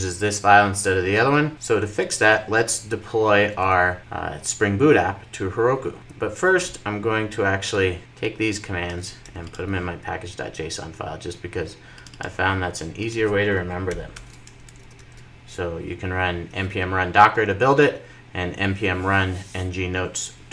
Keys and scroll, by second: 14.1 super+v, 14.5 super+s.